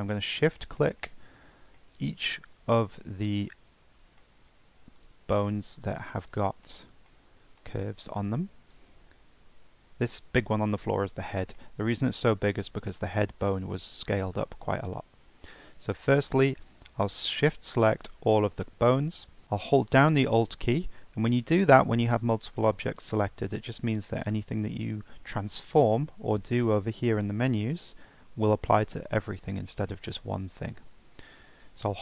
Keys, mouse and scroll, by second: 0.1 shift+click, 0.7-2.4 middle drag, 2.4 shift+click, 2.9-4.9 middle drag, 4.9 shift+click, 5.5-6.2 middle drag, 6.2-6.6 shift+drag, 6.6-8.7 middle drag, 8.7 shift+click, 9.1 scroll down 2, 11.6-12.0 middle drag, 12.0-14.1 scroll down 1, 14.1-14.7 middle drag, 14.7-16.0 scroll up 1, 16.0 shift+click, 16.9-19.4 middle drag.